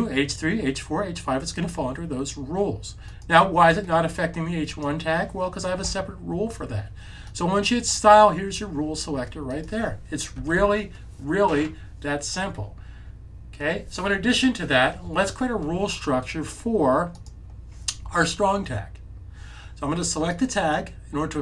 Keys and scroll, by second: 10.4 super+s.